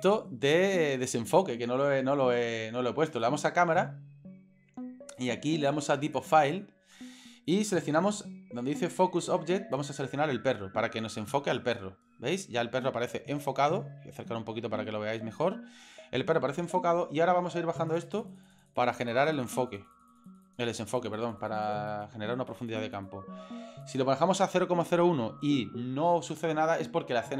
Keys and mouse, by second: 0.0 click, 3.1 click, 5.2 click, 6.1 click, 9.7 click, 17.8 click, 18.3 click, 18.5 click, 18.6 click, 18.9 click, 19.1 click, 20.0 click, 20.1 click, 20.3 click, 20.8 click, 21.5 click, 21.9 click, 22.5 click, 22.8 click, 23.0 click, 23.8 click.